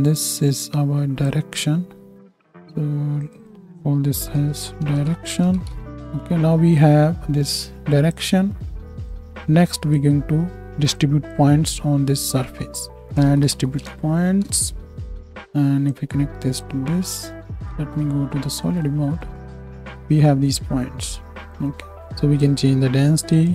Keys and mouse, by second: 2.1 n, 2.5-3.2 drag, 3.3 click, 5.8-6.7 drag, 5.8 n, 15.0-15.9 drag, 17.6 z, 19.9 KP_1.